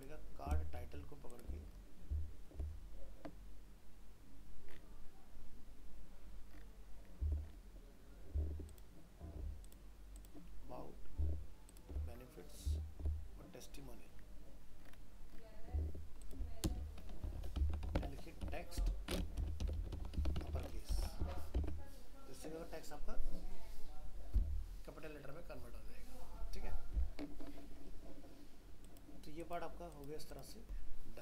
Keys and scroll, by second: 21.2 ctrl+s, 21.6 alt+Tab.